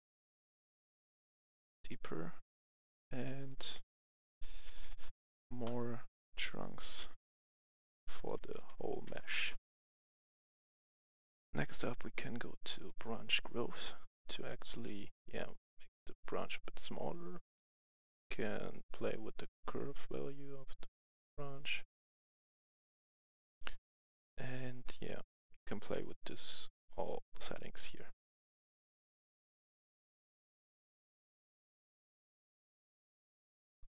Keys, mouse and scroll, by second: 4.6 KP_1, 4.9 KP_0, 5.5 Return, 6.7 click, 7.0 KP_1, 7.2 KP_0, 7.8 click, 8.3 KP_1, 8.6 KP_0, 9.3 Return, 11.2 click, 11.2 F10, 11.8 click, 13.9 scroll down 1, 15.1 click, 15.8-23.5 drag, 23.7-24.1 scroll down 1, 27.3-27.6 scroll up 1, 29.7-33.5 drag, 33.6-33.9 scroll up 1.